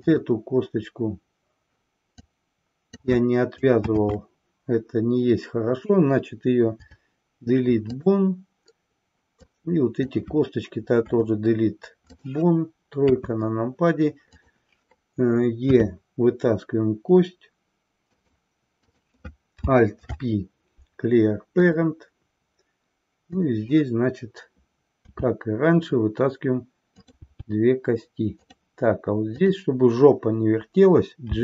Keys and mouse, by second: 0.0 click, 2.1-3.1 drag, 3.8 ctrl+z, 6.7 Delete, 9.5-10.3 drag, 11.0 Delete, 13.1 KP_3, 14.3-14.7 drag, 15.7 e, 18.3 click, 18.9 click, 20.0 alt+p, 23.1 click, 27.3 e, 29.3 click.